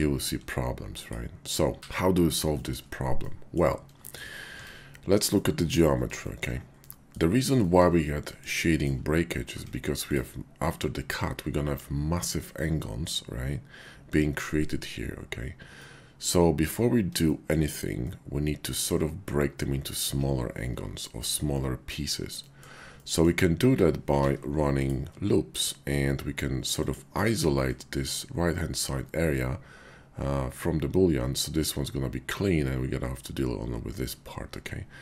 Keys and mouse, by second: 2.5 shift+drag, 3.2 click, 4.4 Tab, 5.4 click, 6.8 middle click, 8.0 middle click, 9.5 Tab, 10.0 click, 15.8 middle click, 18.0 middle click, 21.0 shift+click, 21.5 middle click, 22.4 shift+middle click, 22.9 middle click, 24.1 ctrl+r, 26.7 click.